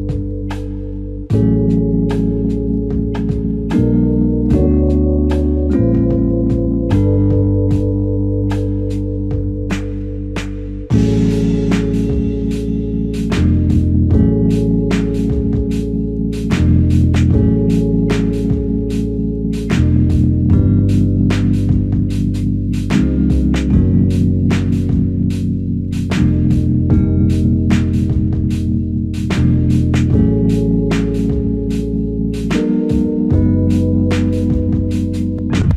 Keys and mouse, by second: 0.6 shift+click, 3.7 alt+click, 5.2 shift+click, 8.2 alt+shift+click, 15.6 alt+click, 17.1 ctrl+click, 21.3 r, 28.6 shift+click, 30.5 shift+click.